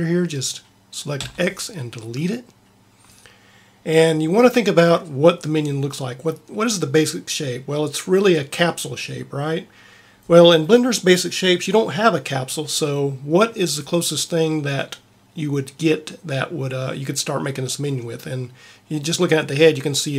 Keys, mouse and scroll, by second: 1.1 x.